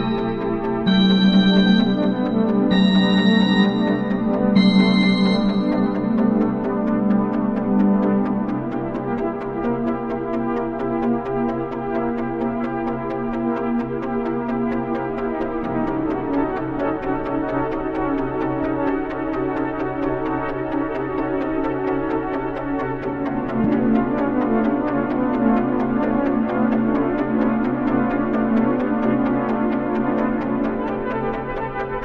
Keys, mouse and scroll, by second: 0.0 click, 4.6-6.5 drag.